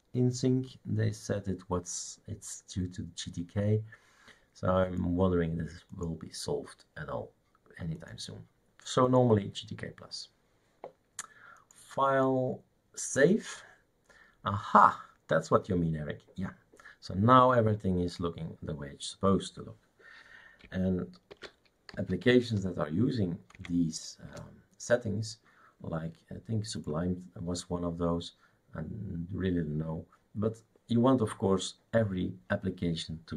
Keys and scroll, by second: 21.3 shift+super+d, 21.9-22.2 typing, 23.6 Right, 24.3 Return.